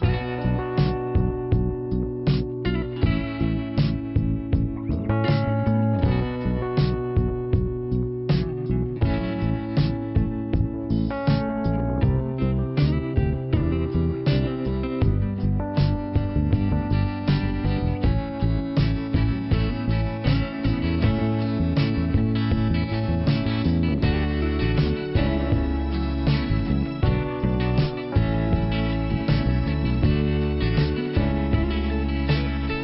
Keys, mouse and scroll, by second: 1.3 click, 10.5 shift+Return, 11.0 middle click, 11.5 Return, 14.1 click, 14.2 click, 16.8 click, 17.4 right click, 18.3 click, 19.8 click, 19.9 click, 20.5 click, 21.5 click, 25.0 click, 25.0 click, 25.7 click, 28.5 middle click, 29.4 click, 30.4 click.